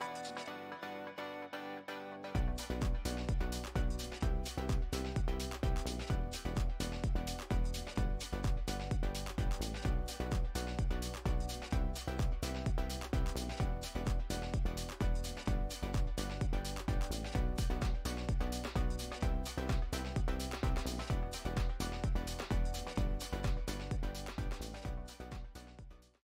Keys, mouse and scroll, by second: 0.9-1.2 scroll down 3, 1.2 Tab, 1.5-2.2 scroll down 5, 2.2-4.7 middle drag, 4.7 s, 7.8 click, 9.7 scroll down 2, 11.5-12.3 scroll down 2, 12.3 click, 13.2 KP_0, 16.1 shift+f.